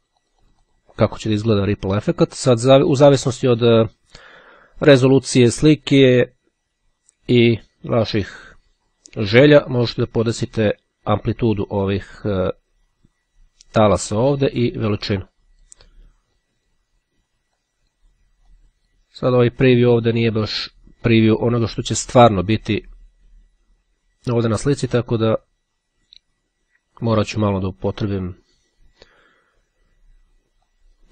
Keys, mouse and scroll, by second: 6.5-11.4 drag, 14.3 click, 16.4 click, 17.6 click, 18.7 click, 20.3 click, 22.3 click, 25.1 click, 27.1-29.0 drag, 30.8 click.